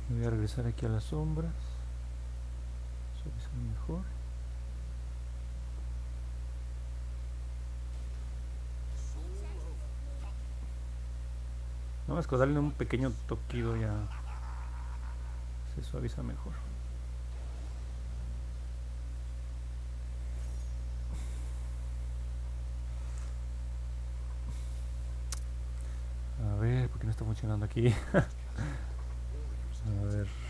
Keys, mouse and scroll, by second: 6.9 click, 7.5 click, 8.1 click, 8.6 click, 9.7 click, 10.7 click, 11.2 click, 11.9 click, 12.4 click, 13.1 click, 13.7 click, 14.6 click, 16.3 click, 17.0 click, 17.6 click, 19.0 click, 19.7 click, 23.1 middle click, 23.1-23.6 scroll down 3, 24.1 scroll up 2, 24.9 alt+middle click.